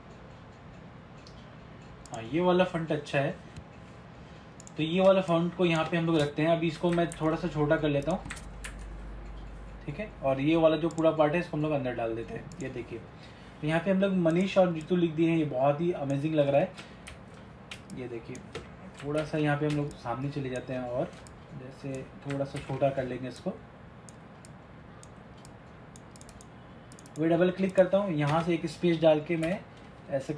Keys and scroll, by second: 7.3 ctrl+-, 17.2 ctrl+=, 22.7 ctrl+t.